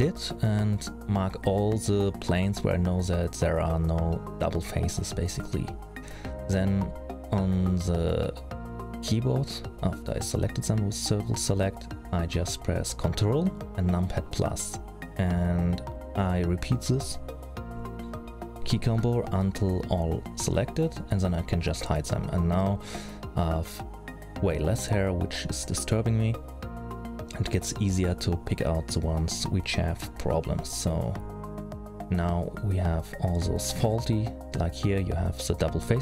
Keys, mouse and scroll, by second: 1.5 middle click, 1.8-2.2 scroll down 4, 2.2 c, 6.4 middle click, 7.7 middle click, 8.6 c, 10.1-10.6 scroll down 5, 10.6 c, 13.7 ctrl+KP_Add, 14.1 ctrl+KP_Add, 14.6 ctrl+KP_Add, 14.9 ctrl+KP_Add, 15.1 ctrl+KP_Add, 15.3-16.6 ctrl+KP_Add, 16.8 ctrl+KP_Add, 17.0 ctrl+KP_Add, 17.4-20.7 ctrl+KP_Add, 21.1 h, 21.6 middle click, 22.4 scroll up 5, 23.0-23.4 scroll up 1, 23.4 middle click, 24.9 c, 28.2 ctrl+KP_Add, 28.7-29.8 ctrl+KP_Add, 30.0 h, 30.9-31.4 scroll up 2, 31.4 middle click, 32.4 middle click, 33.7 l, 34.2 middle click.